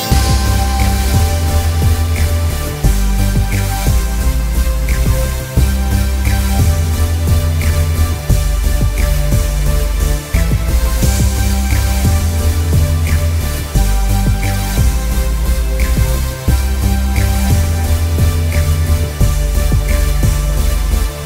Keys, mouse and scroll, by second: 0.9 alt+scroll down 1, 1.0 space, 1.3 alt+scroll up 2, 1.6 click, 3.4 scroll up 1, 3.5 click, 4.7 space, 4.9 click, 5.5 alt+scroll down 1, 5.6 click, 5.7 space, 6.1-6.4 alt+scroll up 2, 6.4 click, 6.5 alt+scroll down 2, 6.7 space, 7.1 scroll up 1, 7.2 click, 7.9 space, 8.2 click, 8.6 space, 8.7 click, 9.6 space, 9.8 click, 10.2 z, 10.3 click, 10.7 scroll up 1, 10.8 click, 11.5 space, 11.7 click, 12.4 space, 12.7 click, 13.1 space, 13.3 click, 14.2-14.7 scroll down 3, 14.4 space, 14.7 space, 14.9 alt+scroll up 2, 15.1 scroll down 2, 15.4 space, 15.5 click, 15.6 space, 15.8-16.6 alt+scroll up 4, 16.1 click, 16.6 click, 19.5 space, 19.9 click, 20.1 z, 20.3 click.